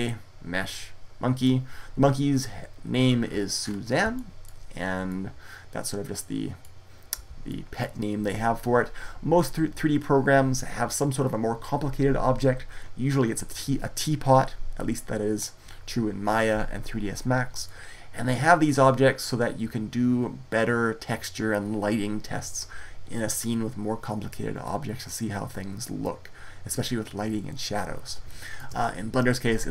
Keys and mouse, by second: 18.9 middle click, 19.0 middle click, 19.5-24.4 middle drag.